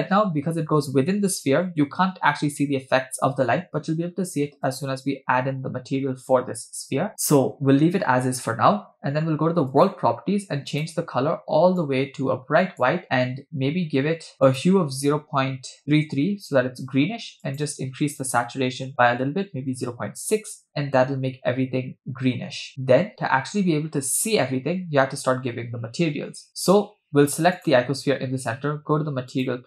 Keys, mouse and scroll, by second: 4.7 click, 9.7 click, 10.7 click, 14.3 click, 15.8 3, 22.7 scroll down 1, 22.8-23.8 scroll down 3, 27.6 click, 29.3 click.